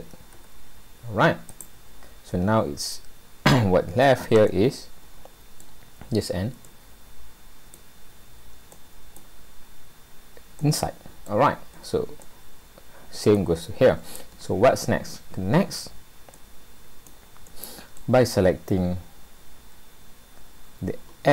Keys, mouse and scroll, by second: 0.3 Delete, 4.3 scroll up 1, 4.5 middle click, 6.7 middle click, 8.8 middle click, 9.7-10.3 scroll up 2, 10.6 middle click, 11.5-12.2 scroll down 7, 12.2 middle click, 14.7 scroll up 2, 16.3 middle click, 18.0 middle click.